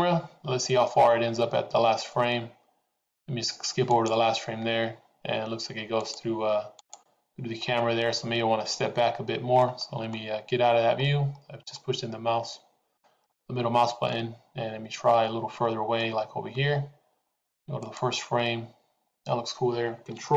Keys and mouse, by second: 4.3 click, 6.1 click, 7.8 click, 9.6 middle click, 11.7-12.9 middle drag, 13.3-16.1 middle drag, 17.7 click.